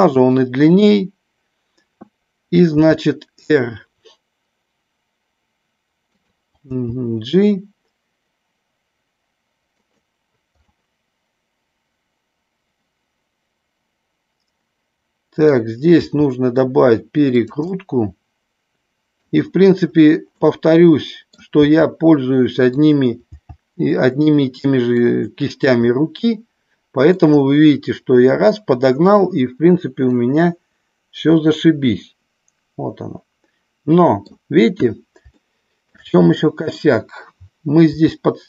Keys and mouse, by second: 0.3 click, 2.6 r, 6.2 click, 6.7 g, 9.8 click, 10.7-15.4 middle drag, 16.0 r, 17.3 click, 17.7-19.5 middle drag, 20.3-21.3 middle drag, 21.7 r, 22.6 click, 23.2 g, 25.0 click, 26.0-27.2 middle drag, 30.1-34.2 middle drag, 35.3 shift+middle click, 36.2 middle click, 37.9 g.